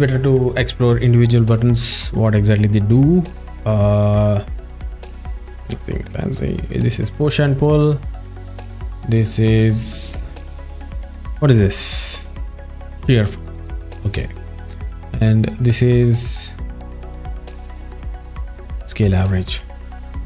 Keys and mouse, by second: 3.1 z, 6.2 click, 8.5 click, 15.5 click.